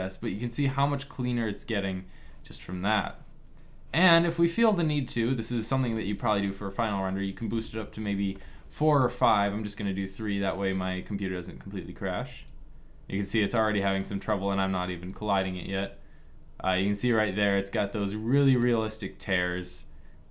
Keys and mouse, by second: 0.6-2.8 middle drag, 4.0-5.4 drag, 5.4 middle click, 5.7-7.1 drag, 8.2 middle click, 8.6-10.6 right drag, 9.1 g, 12.4 g, 15.2 g.